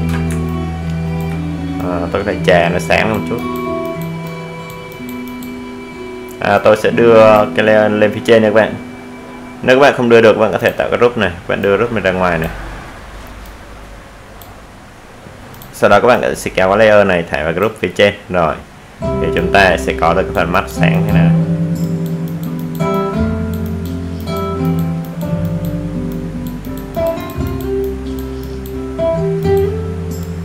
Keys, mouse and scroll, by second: 0.7 ctrl+space, 0.9 ctrl+click, 1.1 ctrl+space, 1.7-3.0 alt+right drag, 3.0-12.5 drag, 12.5-30.4 drag.